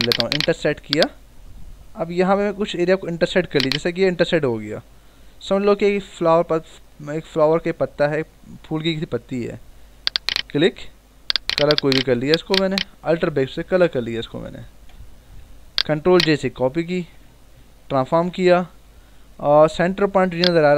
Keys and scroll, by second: 13.7 alt+BackSpace, 14.6 ctrl+d, 15.4 v, 16.9 ctrl+j, 18.0 ctrl+t, 19.1 ctrl+=.